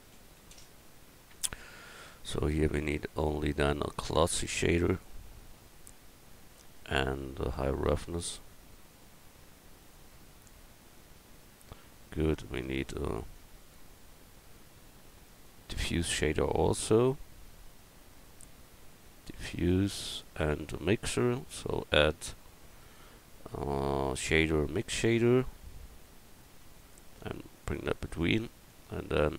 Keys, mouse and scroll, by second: 7.1-10.8 drag, 12.0-13.1 middle drag, 13.5-17.5 drag, 17.4 right click, 21.2-24.0 drag, 28.7-29.3 drag.